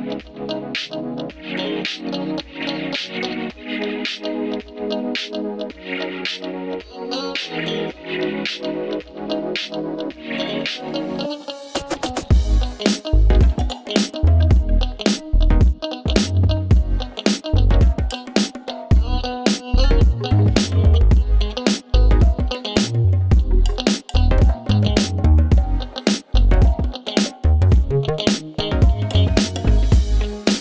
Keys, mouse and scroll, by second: 6.9-9.6 drag, 15.7 space, 18.8 click, 19.7 space, 22.4 space, 23.4 click, 23.9 click, 26.1 right click, 26.8 click, 28.5-29.5 typing, 30.5 click.